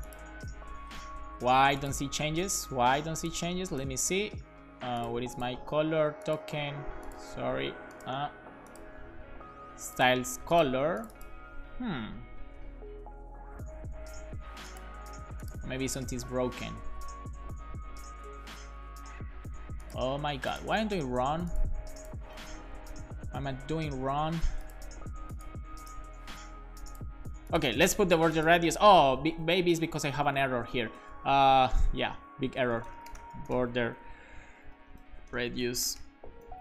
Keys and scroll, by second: 0.8 Return, 1.0 super+s, 22.3 super+s, 30.1 Down, 30.5 Left, 30.9 Down, 31.5 Down, 32.6-34.0 typing, 35.3-36.6 typing.